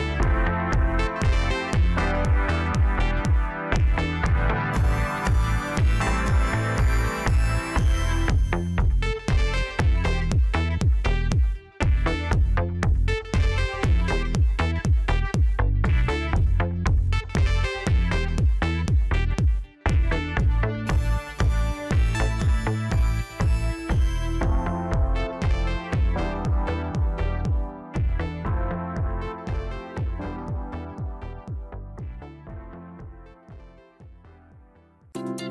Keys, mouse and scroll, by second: 0.3 scroll down 3, 4.7-5.5 scroll down 2, 5.5-7.8 middle drag, 7.8 Tab, 9.2 a, 10.7 s, 13.8 Tab, 14.6-15.6 middle drag, 15.6 scroll up 2, 17.0 click, 18.3 click, 18.7 click, 19.3 scroll down 3, 19.5-22.6 middle drag, 23.7 click, 24.2-25.2 scroll down 5, 25.2 scroll up 1, 26.0-26.7 middle drag, 26.7 scroll down 2, 26.9-30.0 middle drag, 32.6 click, 33.1-34.3 middle drag, 34.3-34.8 scroll up 1.